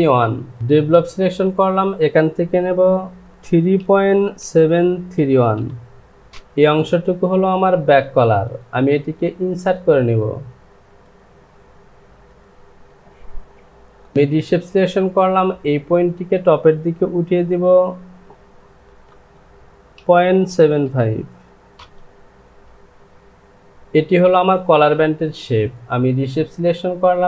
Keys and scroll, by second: 3.3 Down, 3.4 KP_3, 4.4 KP_Decimal, 5.1 KP_7, 6.3 Return, 14.1 ctrl+z, 17.4 Down, 18.9 KP_0, 19.1 Down, 20.5 KP_Decimal, 21.7 Return.